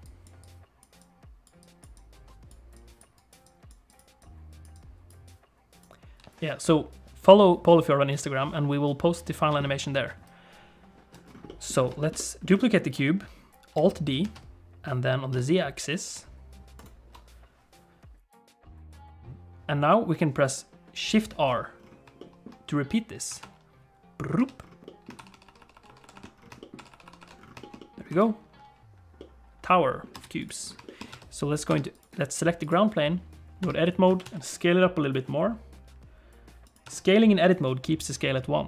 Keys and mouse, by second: 0.0-6.1 typing, 0.0 click, 0.4 click, 1.0 click, 1.9 click, 2.7 click, 3.2 click, 3.4 click, 3.9 click, 4.2 click, 4.7-6.2 drag, 10.1 d, 10.2 right click, 11.5 middle click, 12.0 shift+middle click, 12.2 middle click, 12.6 shift+middle click, 14.2 alt+d, 22.2 shift+click, 23.4-28.1 typing, 24.9-25.9 shift+middle drag, 26.6 middle click, 27.6 shift+middle click, 27.8 middle click, 29.2 middle click, 30.1 space, 30.9 middle click, 31.1 Tab, 31.7 Tab, 32.0 click, 33.6 Tab, 34.1 a, 34.2 s, 36.8 Tab.